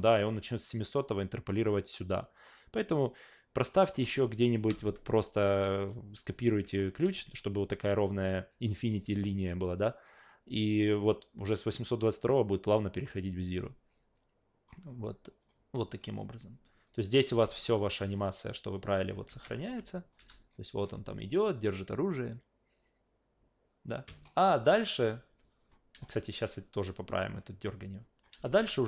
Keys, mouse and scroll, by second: 2.8-3.7 drag, 4.0 alt+middle click, 4.7 s, 5.9 alt+middle click, 6.4 alt+right click, 11.5-13.0 drag, 13.9 click, 15.4 click, 16.8-17.2 drag, 17.3 alt+v, 17.8-18.7 alt+drag, 19.3 alt+v, 19.6 click, 20.0 alt+middle click, 20.2 alt+v, 20.3 alt+right click, 25.9 alt+v, 28.0 click, 28.3 alt+v.